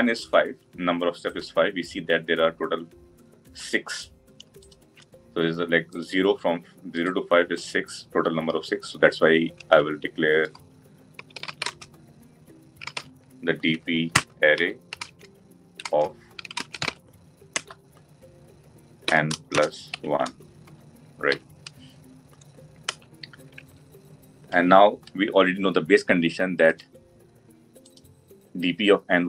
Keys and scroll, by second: 17.4 Return.